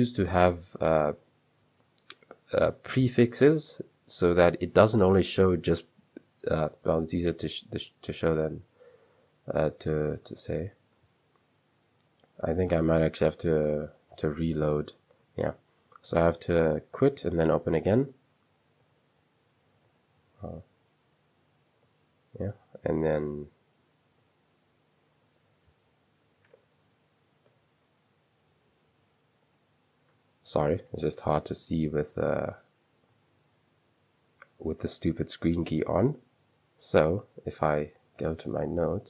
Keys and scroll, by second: 7.9 super+3, 10.2 space, 10.5 shift+r, 12.0 j, 13.8-17.9 typing, 15.4 Escape, 18.8 Return, 19.9-20.7 typing, 21.9 Return, 22.9 v, 23.1 space, 24.2 Return, 25.3-27.5 typing, 27.5 Return, 28.8-30.0 typing, 31.4 Return, 33.0 Return, 33.2-33.9 typing, 35.4-36.2 typing, 37.4-39.0 typing.